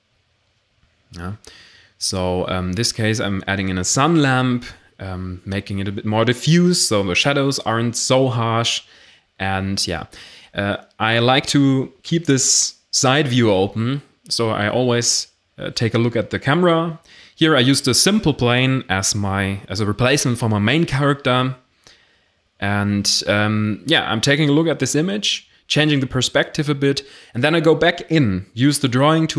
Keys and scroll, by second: 0.0-1.7 typing, 8.9 r, 9.0 z, 11.1-16.0 typing, 19.7 s, 21.7 r, 21.7 x, 23.5 g, 23.6 z, 24.6 r, 24.6 x.